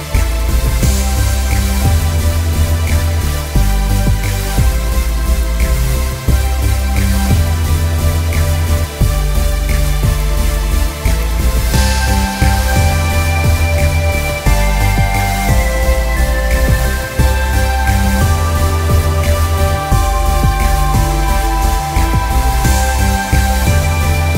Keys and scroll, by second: 15.1 ctrl+-, 15.3 ctrl+-, 15.5 ctrl+-, 15.6 ctrl+-, 16.5 ctrl+=, 17.2 ctrl+-, 20.1 ctrl+z, 21.5-23.2 ctrl+=.